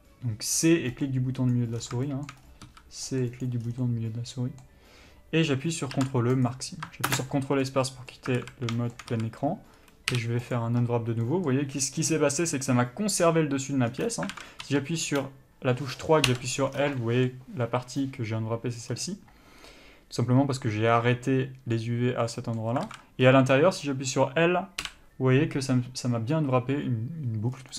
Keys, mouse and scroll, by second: 2.0-2.3 scroll down 2, 2.3-3.8 shift+middle drag, 2.6-3.3 scroll up 2, 3.3 c, 3.8 scroll down 2, 4.0-7.3 middle drag, 6.7 ctrl+e, 7.3 ctrl+space, 8.6 alt+a, 9.0 shift+middle click, 9.3-10.0 scroll up 1, 10.8 u, 14.1-14.5 scroll down 1, 14.5 alt+a, 14.8 3, 16.5 l, 16.9 scroll down 1, 17.2 middle click, 19.1 scroll up 1, 22.6 middle click, 23.1 alt+a, 23.4-24.0 scroll up 1, 24.0 middle click, 25.1 l.